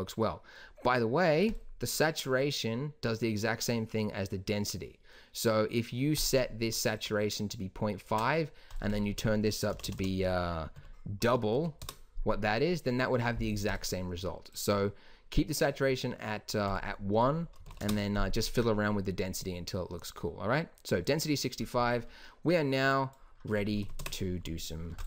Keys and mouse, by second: 10.0 BackSpace, 10.1 BackSpace, 23.1-24.5 drag, 24.0 KP_0, 24.2 KP_0.